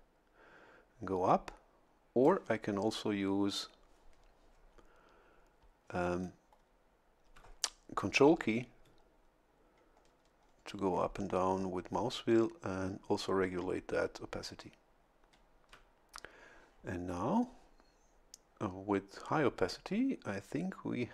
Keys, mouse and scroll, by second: 6.6-7.0 ctrl+scroll up 2, 9.2-9.6 ctrl+scroll down 4, 10.0-10.4 ctrl+scroll up 2, 10.5 ctrl+scroll down 2, 11.0 ctrl+scroll up 2, 11.8 ctrl+scroll down 2, 12.3 ctrl+scroll up 2, 13.0-13.4 ctrl+scroll down 2.